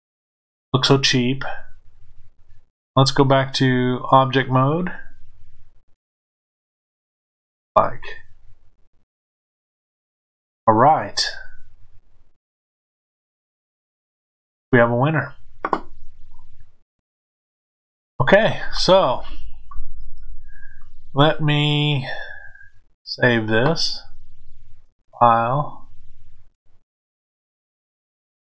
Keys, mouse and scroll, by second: 3.3-5.6 drag, 5.6-24.8 middle drag, 24.8-28.5 drag.